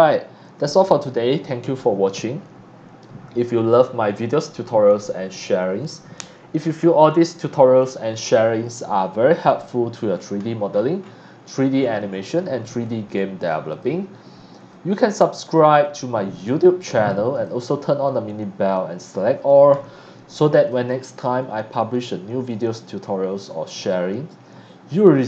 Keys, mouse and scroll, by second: 9.5 click, 10.1 scroll down 1, 10.4-11.5 scroll up 6, 11.7-12.4 scroll down 3, 12.8 x, 12.8 click, 13.7 click, 14.5 click, 15.8 click, 16.5 click, 17.1 click, 17.1 x, 17.6-19.5 drag, 17.6 z, 19.7-20.1 scroll down 2, 20.3 x, 20.4 click, 20.7 c, 20.9-22.5 drag, 22.7 scroll up 2, 23.0 scroll down 1, 23.4 click, 25.2 click.